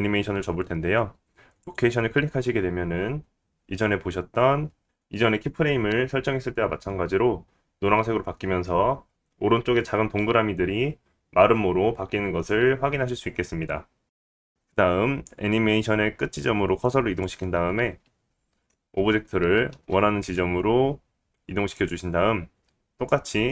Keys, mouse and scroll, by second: 14.0-21.8 drag, 14.0-21.8 middle drag, 18.9 g.